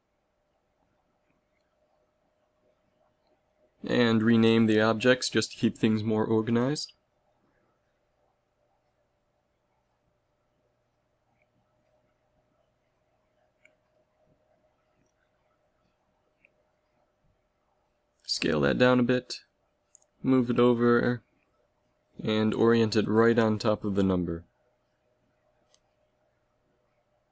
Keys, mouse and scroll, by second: 3.1-6.2 right drag, 7.7-10.2 right drag, 12.4-14.4 right drag, 14.4 s, 17.3-19.7 drag, 18.3 s, 20.3 g, 22.8 g, 25.8 s.